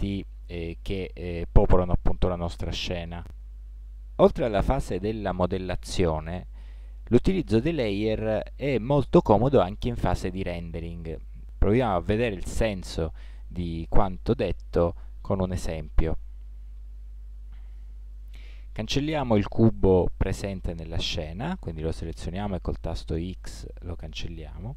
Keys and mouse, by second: 16.2-17.7 middle drag, 19.8-21.5 middle drag, 22.1 x, 23.9-24.7 middle drag.